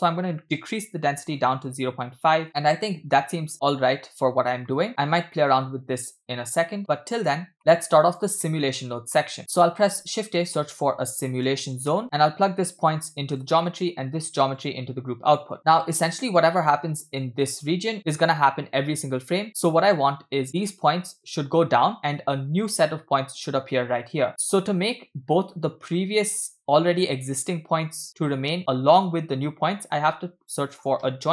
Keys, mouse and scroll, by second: 2.6-3.5 middle drag, 4.9 middle click, 4.9 scroll down 3, 6.8 click, 7.6 middle click, 7.8-8.2 drag, 8.5 middle click, 8.8-9.2 scroll up 2, 9.2 middle click, 9.4 shift+a, 10.0 shift+a, 12.7-13.5 drag, 13.7 middle click, 14.6-15.5 drag, 15.6 middle click, 16.4-16.8 drag, 17.2 click, 30.0 shift+a.